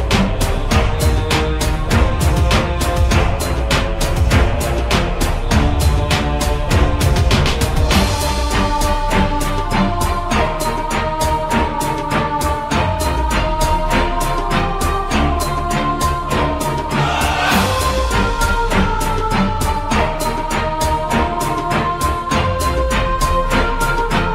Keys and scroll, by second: 11.0 u, 12.8-13.9 typing, 18.1 ctrl+z, 20.2 w, 22.4 m.